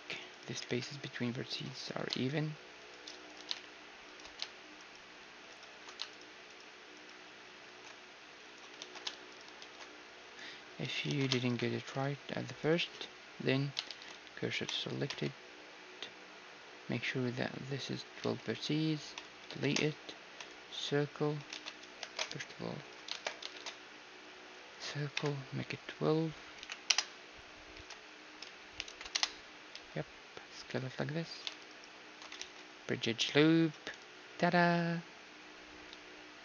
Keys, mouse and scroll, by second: 0.6 g, 2.0 g, 3.5 g, 5.2 alt+shift+s, 7.6 alt+shift+s, 8.8 ctrl+z, 9.3-11.1 right drag, 9.6 alt+shift+s, 11.1 ctrl+z, 11.4-13.9 right drag, 11.8 alt+shift+s, 13.9 shift+s, 15.1 x, 18.2 x, 19.6 shift+a, 21.6 ctrl+z, 22.1 shift+space, 22.9-24.8 drag, 23.6 shift+a, 25.2 F6, 27.8 r, 29.7 s, 31.7-34.0 right drag, 32.4 ctrl+e, 35.9 a.